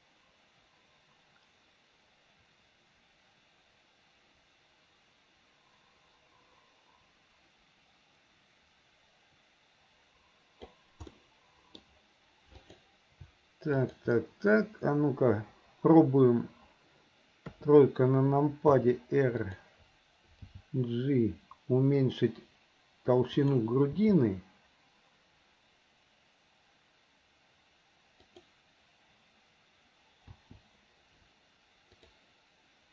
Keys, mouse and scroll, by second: 11.2-11.8 middle drag, 12.6 click, 13.8 shift+click, 17.5 KP_3, 18.7 r, 20.5 g, 24.0 g, 30.4 i, 32.0 click.